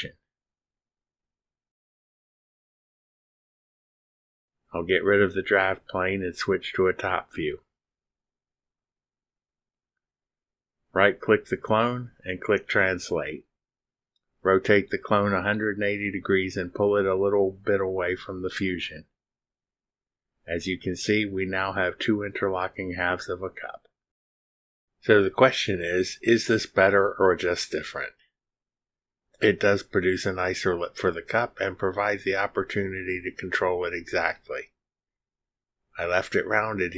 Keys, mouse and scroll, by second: 0.4 click, 3.4 click, 5.0-5.9 typing, 7.4-8.6 drag, 8.7-9.2 drag, 10.4 click, 10.7 click, 11.4 click, 12.5 middle click, 13.2 click, 14.0-16.2 drag, 16.6-18.0 drag, 19.8 click, 20.5 middle click, 20.6 click, 21.1-23.9 drag.